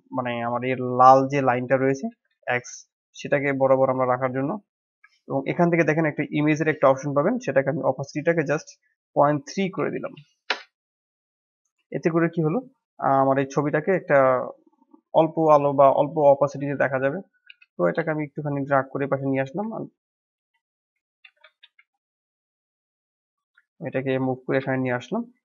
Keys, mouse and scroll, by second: 2.0 g, 4.8-5.1 scroll down 1, 5.1-7.2 shift+middle drag, 7.2-11.7 drag, 11.7-16.6 middle drag, 16.6-17.2 drag, 17.2 g, 21.2 g, 22.9 click, 23.4 scroll down 3, 23.7 middle click, 24.5 KP_1.